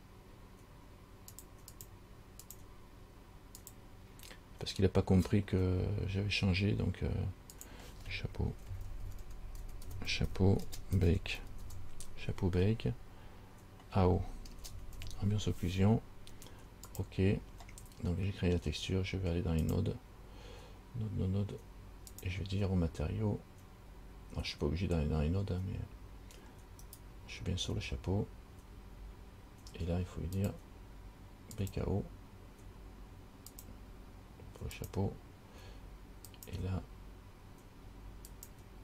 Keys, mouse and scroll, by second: 3.8 click, 19.8 click, 27.1 right click, 30.6 click, 33.7 click, 35.0 click, 36.5 click, 38.5 click.